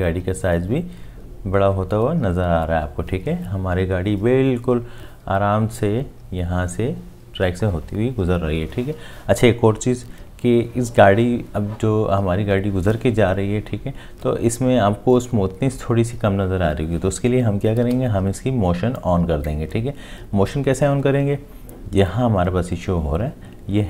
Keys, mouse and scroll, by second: 17.8 space.